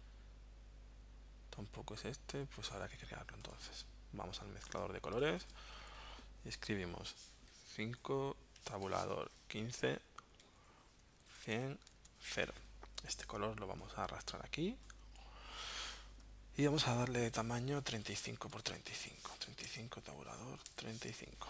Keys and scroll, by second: 7.7 5, 8.6 Tab, 8.8 1, 9.1 5, 10.4 Tab, 10.9-11.8 typing, 11.9 Tab, 18.9-21.3 typing.